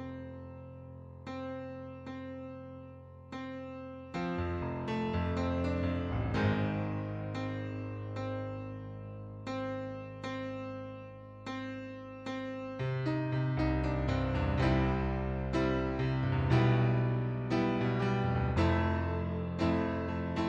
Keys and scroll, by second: 10.0 4, 10.2 Return, 11.7-13.9 typing.